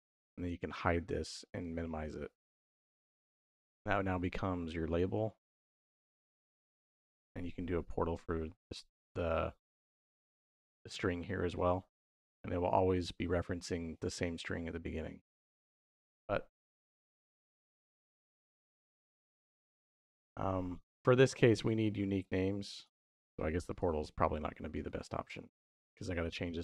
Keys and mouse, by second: 0.3 h, 1.4 click, 2.8 middle click, 3.6-4.8 drag, 5.7-7.0 drag, 7.2 middle click, 9.9 click, 12.5 middle click, 15.2 click, 16.6 middle click, 18.5-20.0 middle drag, 23.5 click, 24.7 x, 25.4-25.9 drag.